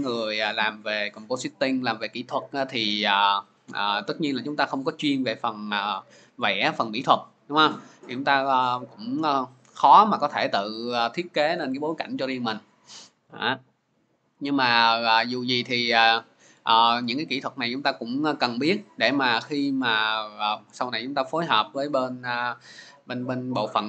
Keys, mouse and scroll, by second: 13.9 click.